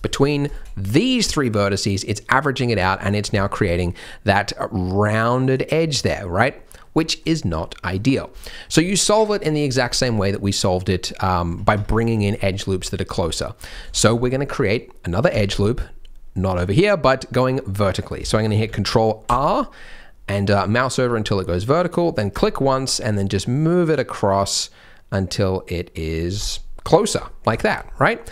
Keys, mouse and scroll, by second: 0.4 shift+click, 0.8 middle click, 2.3 middle click, 2.8 middle click, 3.5 shift+middle click, 3.5-5.8 shift+scroll up 2, 6.0 middle click, 6.8 middle click, 7.2 scroll down 1, 7.6 middle click, 7.9-8.3 scroll down 3, 8.3 middle click, 9.9-10.3 scroll down 3, 11.4 Tab, 12.7 Tab, 12.7-13.3 scroll up 7, 13.3 middle click, 13.7 scroll down 3, 13.9 shift+middle click, 17.8 middle click, 18.2 shift+middle click, 19.2 ctrl+r, 27.1-28.0 scroll up 3, 27.6 shift+middle click, 28.0 middle click.